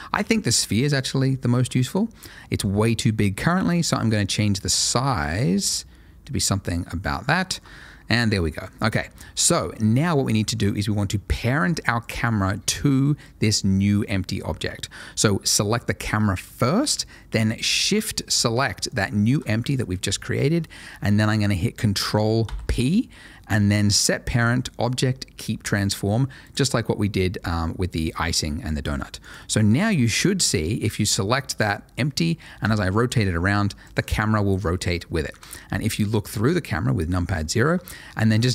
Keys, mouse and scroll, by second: 0.7-2.4 scroll up 2, 0.8 middle click, 2.4 middle click, 3.0-4.0 scroll up 1, 4.0 click, 6.8 middle click, 7.0 scroll down 1, 7.4 shift+middle click, 7.6 shift+middle click, 8.7-9.6 scroll down 1, 9.6 middle click, 9.9 shift+middle click, 10.4 shift+middle click, 12.0 click, 14.8 scroll up 1, 19.4 shift+click, 22.8 ctrl+p, 26.4 click, 27.5 middle click, 29.2 click, 32.6 r, 33.8 right click, 34.2 middle click, 35.3 KP_0, 37.8 shift+middle click.